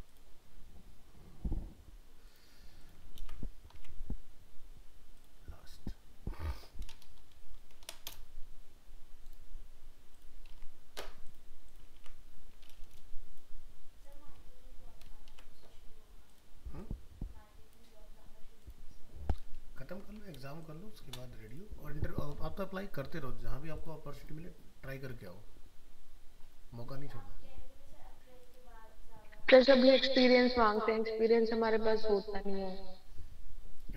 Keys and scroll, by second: 3.2 ctrl+v, 3.8 alt+Tab, 10.6 alt+Tab, 12.0 ctrl+v, 15.3 ctrl+z, 19.6 ctrl+-.